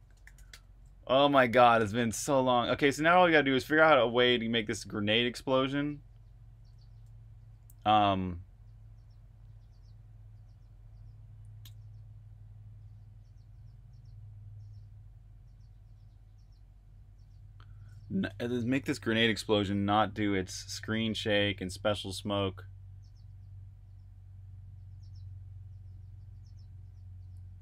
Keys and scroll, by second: 0.0-0.7 typing, 11.5 super+j, 17.0-18.0 typing.